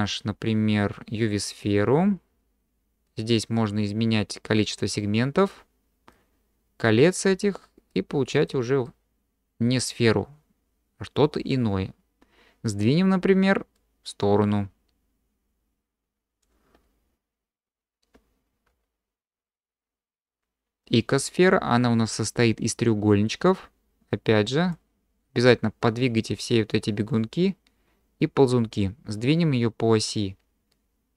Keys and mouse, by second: 3.2-5.5 drag, 6.3-6.9 drag, 8.0-8.5 drag, 8.8-9.9 middle drag, 13.9-16.4 drag, 18.7 q, 24.1 click, 25.4-26.2 drag.